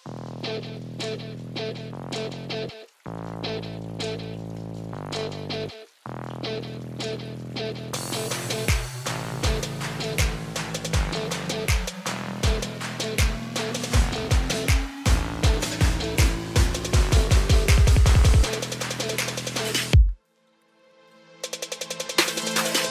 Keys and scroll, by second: 7.5 ctrl+a.